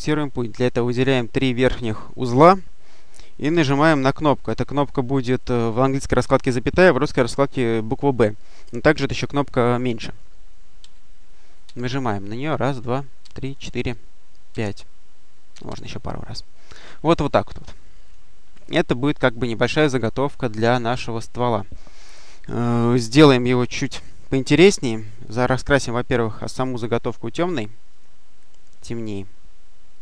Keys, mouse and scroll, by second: 0.3 click, 10.7 ,, 11.5 ,, 13.1 ,, 14.4 ,, 15.4 ,, 17.5 click, 18.5 click, 26.1 click, 27.8 click, 29.8 click.